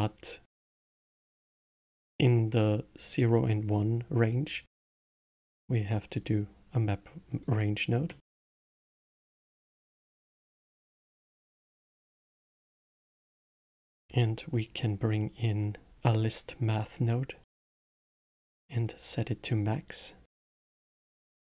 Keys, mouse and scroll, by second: 8.0 middle click, 8.7-9.9 drag, 9.9 middle click, 10.5-12.8 scroll up 3, 12.8 click, 13.7 shift+a, 18.3-21.1 drag.